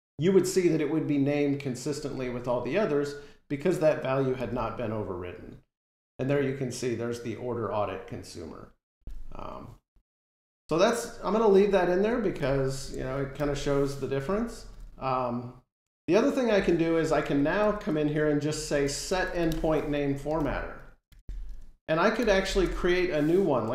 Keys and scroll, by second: 13.2 Delete, 14.0 Delete, 14.0 super+s, 14.6 ctrl+Tab, 18.9 Delete, 20.2 Delete.